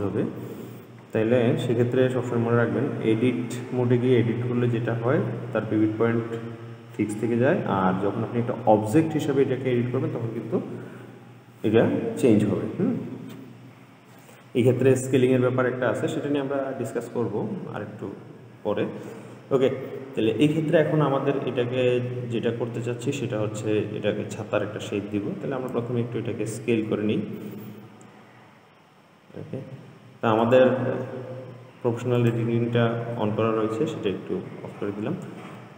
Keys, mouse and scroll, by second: 22.8 scroll down 2, 26.1 s, 32.4 click.